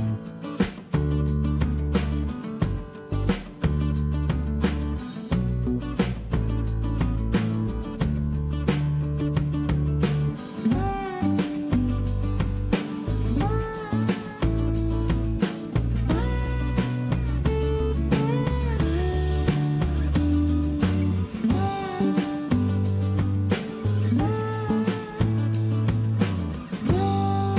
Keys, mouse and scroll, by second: 3.2 space, 4.0 e, 5.0 space, 10.6 space, 15.2 Delete, 22.9 m, 24.6 ctrl+shift+space.